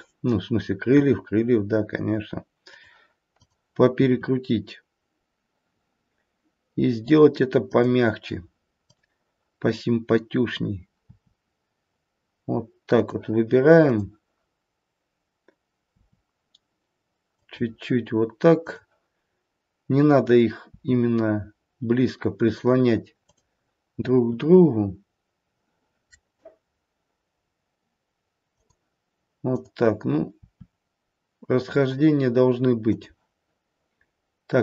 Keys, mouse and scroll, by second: 0.8 r, 3.3 click, 4.9 r, 8.8 click, 10.9 r, 13.8 click, 15.9 r, 18.5 click, 20.6 r, 23.1 click, 25.9 r, 29.5 click, 31.0 r.